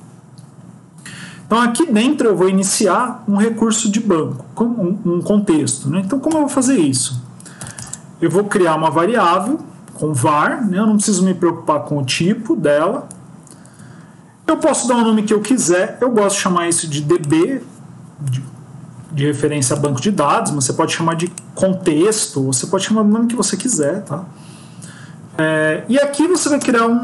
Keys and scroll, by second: 6.9 BackSpace.